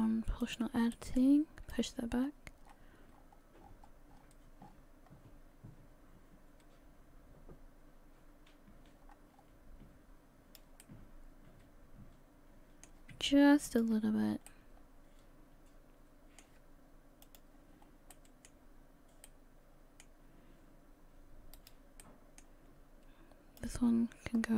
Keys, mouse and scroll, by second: 13.7 middle click, 13.7 click, 14.5 middle click.